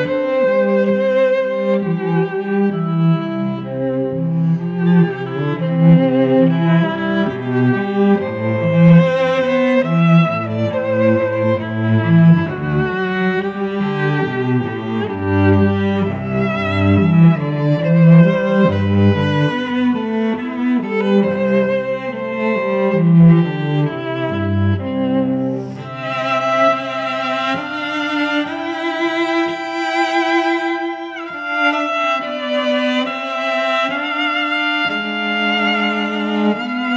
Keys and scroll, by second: 3.2 Return, 3.6 v, 4.8 F9, 5.2 shift+Up, 7.0 Return, 7.4 v, 8.5 a, 10.4 v, 11.3 c, 11.6 v, 12.5 ctrl+t, 14.7 Return, 16.8 v, 22.5-23.9 typing, 26.0-27.8 typing.